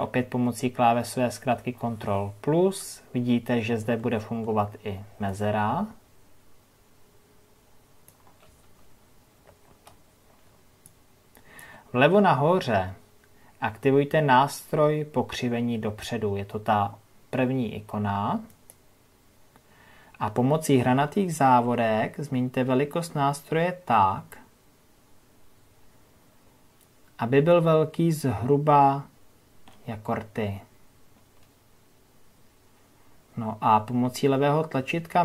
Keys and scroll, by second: 0.9 ctrl+KP_Add, 11.2 ctrl+KP_Add.